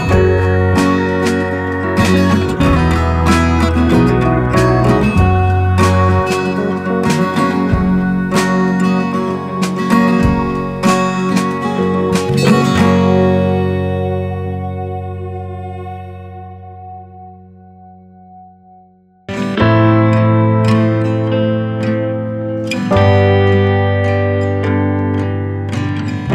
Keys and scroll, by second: 1.1 ctrl+alt+shift+e.